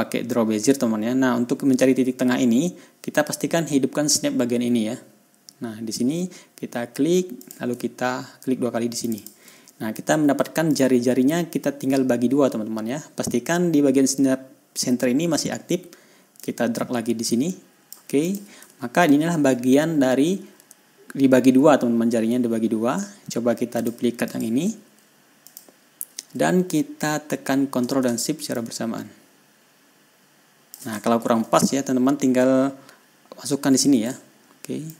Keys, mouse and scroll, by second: 7.9 click, 9.5 ctrl+click, 11.2 click, 16.9-18.5 drag, 18.7 click, 19.3 ctrl+scroll up 2, 20.4 ctrl+scroll down 2, 24.2 click, 24.7 right click, 25.9 click, 29.0-31.3 ctrl+shift+drag, 31.6-31.9 ctrl+shift+scroll up 1.